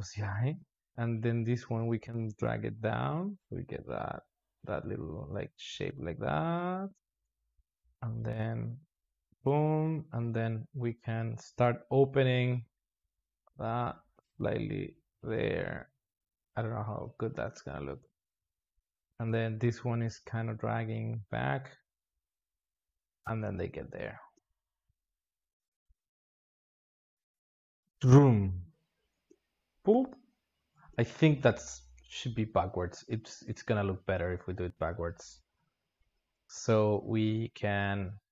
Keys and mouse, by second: 0.6 alt+shift+z, 1.2 click, 1.6 g, 7.1 alt+shift+z, 7.5 alt+shift+z, 7.9-13.0 drag, 16.0-18.6 drag, 18.6 g, 22.1-23.8 drag, 23.8 alt+shift+z, 24.1 space, 25.5 space, 25.9-27.4 drag, 29.0 space, 30.5 space, 31.3-32.1 drag, 32.1 alt+shift+z, 34.6-36.0 drag, 36.8-38.3 drag.